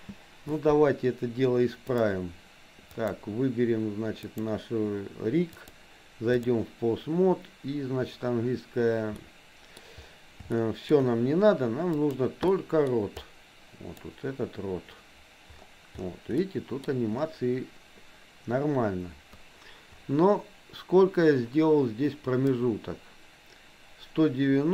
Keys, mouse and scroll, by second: 0.0 space, 2.9 click, 4.4 click, 5.6 click, 9.2 middle click, 10.6 shift+middle click, 11.9 click, 12.5 middle click, 13.2 click, 16.4 middle click, 22.6-24.7 drag.